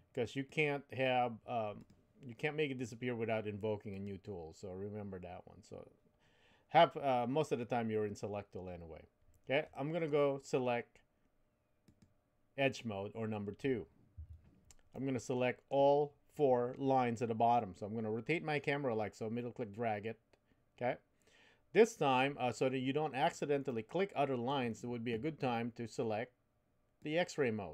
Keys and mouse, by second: 0.6 click, 1.8 click, 2.7 click, 4.0 click, 11.8 click, 14.2 2, 14.9 middle click, 17.1-22.2 middle drag, 23.6 middle click, 27.0 click.